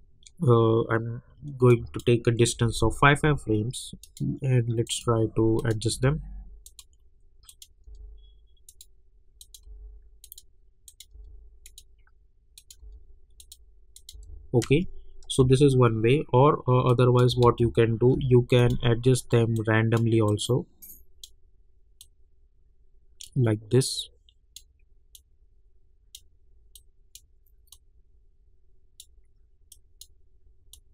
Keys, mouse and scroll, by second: 1.7 click, 2.5 =, 2.7 =, 3.2 =, 4.0 click, 5.9 [, 6.6 click, 7.8 [, 8.7 click, 9.6 [, 10.2 click, 11.1 [, 11.6 click, 12.8 [, 13.4 click, 14.1 [, 14.6 space, 16.9 click, 17.4 ctrl+a, 18.1 [, 18.6-30.9 drag.